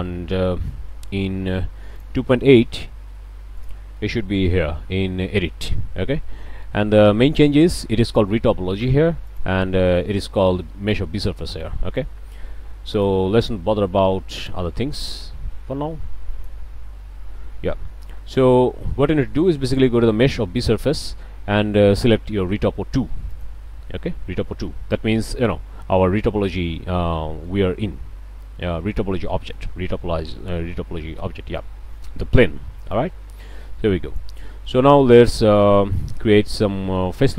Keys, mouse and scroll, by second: 3.6 drag, 4.0 click, 4.4 n, 7.3 click, 9.3 click, 12.9 click, 14.4 click, 16.3 click, 18.9-19.2 scroll down 3, 19.4 shift+click, 20.6 click, 23.3 click, 25.1-25.5 drag, 27.1-27.6 shift+drag, 27.7 shift+Tab, 28.6 Tab, 29.2 click, 32.9-34.4 drag, 34.5-34.8 middle drag, 34.8-35.2 scroll up 2, 35.2 click, 35.3 middle click, 35.6 scroll up 2, 36.0 shift+middle click, 36.4 scroll up 1.